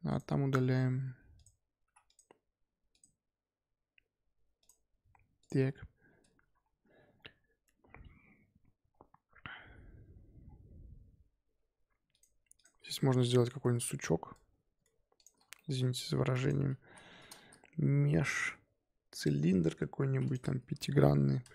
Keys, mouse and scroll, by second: 0.1 click, 1.8 x, 2.9 click, 5.4 click, 8.2-8.8 scroll down 2, 8.9-10.4 scroll up 3, 10.4-11.5 scroll down 1, 11.5-12.1 scroll up 2, 12.1 click, 12.5 click, 12.9 shift+middle drag, 13.1 scroll up 1, 13.7 Tab, 13.7-14.3 scroll up 1, 14.3-14.7 scroll up 3, 14.7 1, 15.1 click, 15.5 shift+middle click, 15.8-16.4 scroll up 3, 16.4 shift+click, 16.7 shift+s, 17.1 Tab, 17.4 shift+a, 20.2-21.5 drag.